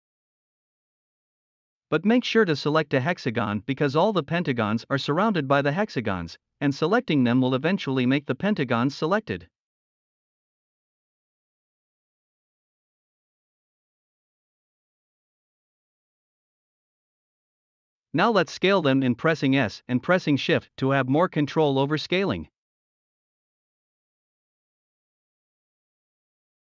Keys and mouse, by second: 0.6-0.9 middle drag, 1.3-1.7 middle drag, 2.2-2.6 middle drag, 3.3 middle click, 7.3 middle click, 8.2 shift+middle click, 8.4 middle drag, 10.0 middle click, 11.2 shift+g, 12.1 middle click, 12.7 shift+d, 12.9 middle click, 13.8 middle click, 14.4 ctrl+z, 14.7 middle click, 15.1-15.9 middle drag, 16.1-16.8 middle drag, 18.5 s, 23.2 shift+click, 24.2 middle click, 25.0 middle click, 25.4 middle click, 25.9 alt+z, 26.0 middle click, 26.1 click, 26.1-26.4 middle drag, 26.6 middle click.